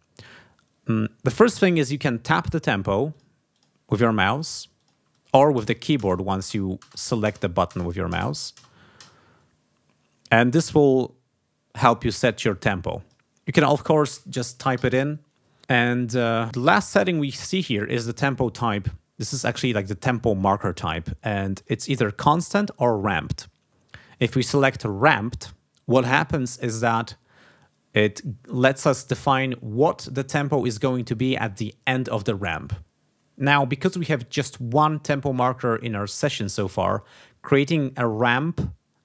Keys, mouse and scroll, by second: 3.1 click, 3.5 click, 3.9 click, 4.3 click, 4.7 click, 5.1 click, 5.5 space, 12.5 click, 14.2-15.2 typing, 21.5 click, 24.9 click.